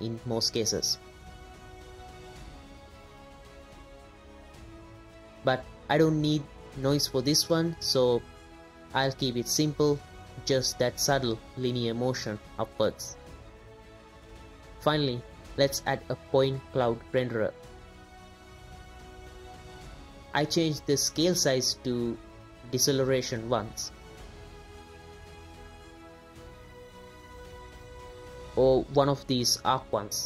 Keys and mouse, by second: 4.8-5.3 drag, 7.8 space, 9.2 click, 10.4 click, 12.4 space, 13.4-14.5 drag, 13.4-14.5 middle drag, 13.4-14.5 right drag, 14.8-17.8 drag, 17.8 space, 19.8 space, 20.8-22.7 drag, 23.0 middle drag, 23.6-23.9 drag, 24.2 drag, 24.9-25.3 drag, 25.4 space, 28.5-29.2 drag, 29.7 space, 30.0-30.2 drag.